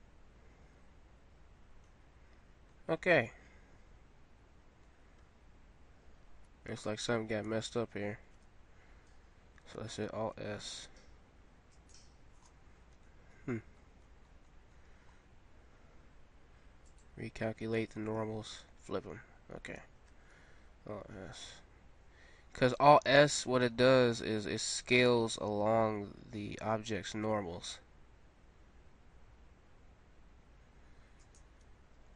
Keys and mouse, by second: 2.4 middle click, 5.2 Tab, 6.8 ctrl+z, 7.5 ctrl+z, 10.0 alt+s, 12.4-20.3 middle drag, 20.5 alt+s.